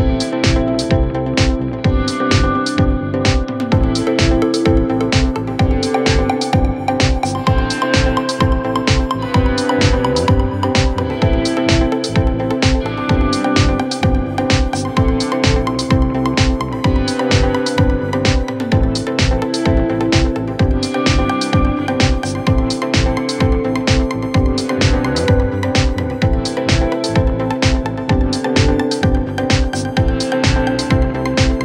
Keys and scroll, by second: 3.2 p, 4.5 3, 6.9 3, 7.6 ], 8.8 4, 12.1 3, 12.6 ], 13.6 ], 14.7 4, 17.1 ctrl+d, 17.2 Escape, 19.3-23.4 typing, 25.1 p, 28.0 F1, 29.5 F1, 29.8 F2, 30.2 1.